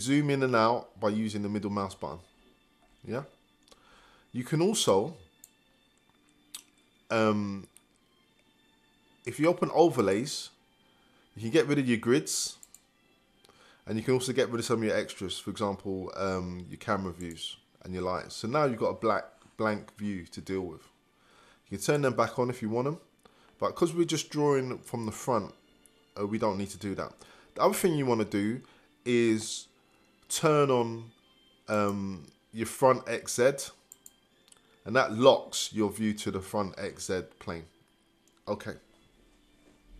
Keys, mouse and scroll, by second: 0.9 scroll down 1, 1.8-2.3 scroll up 1, 2.3 scroll down 1, 3.1-3.7 scroll up 1, 3.7-4.9 scroll up 1.